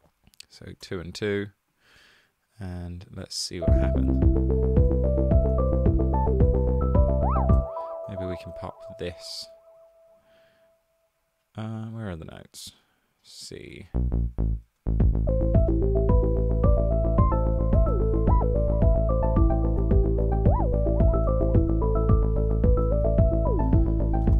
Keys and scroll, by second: 0.8 typing, 3.9 space, 4.8 space, 4.9 super+d, 7.6 space, 8.1 super+a, 13.7 super+a, 14.1 Down, 14.3 Down, 14.7 space, 19.8 super+d.